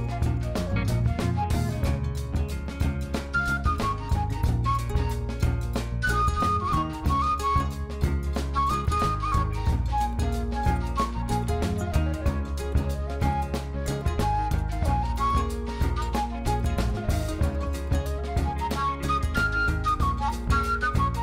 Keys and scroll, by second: 9.9 Tab, 12.4 2, 13.3 shift+s, 13.8 Tab, 14.5 shift+a, 19.6 shift+a, 21.1 Tab.